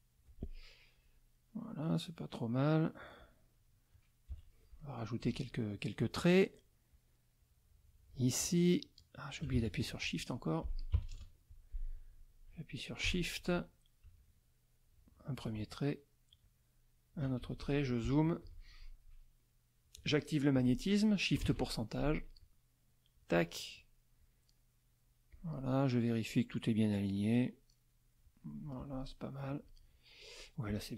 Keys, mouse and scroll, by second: 1.0-2.3 drag, 4.3 KP_Subtract, 4.8 middle click, 5.2 F6, 6.9-8.3 drag, 9.6 ctrl+shift+z, 9.9 ctrl+shift+F2, 10.2 ctrl+shift+click, 10.9 KP_Subtract, 11.1 KP_Add, 12.1 click, 13.0 F6, 14.2-15.6 shift+drag, 16.4 shift+click, 17.5 shift+z, 17.6 shift+click, 18.1 shift+middle click, 18.4 F2, 22.4 click, 24.2-25.7 drag, 26.9-28.3 drag, 29.4 click.